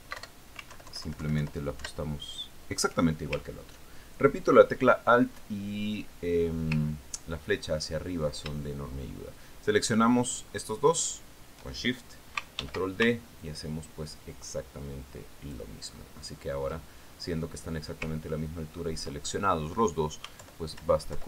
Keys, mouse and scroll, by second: 1.6 alt+Up, 2.2 alt+Down, 5.0-5.6 ctrl+scroll down 2, 6.7-7.2 ctrl+scroll down 2, 7.9-8.2 scroll up 3, 8.4-8.7 ctrl+scroll down 2, 9.1 ctrl+click, 12.4 shift+click, 14.1 ctrl+d, 14.9-17.2 ctrl+drag, 17.4-18.1 ctrl+scroll up 2, 18.8-20.0 ctrl+scroll down 5, 20.0 ctrl+middle click, 20.5 ctrl+scroll up 2.